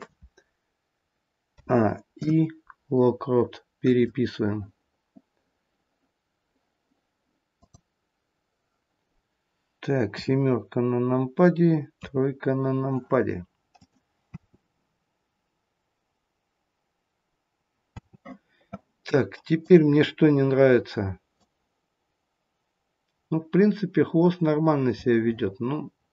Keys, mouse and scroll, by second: 1.5 a, 2.2 i, 7.6 click, 10.0 KP_7, 11.8 KP_3, 13.9 click, 14.3 space, 18.0 space, 19.5 click, 21.4 click.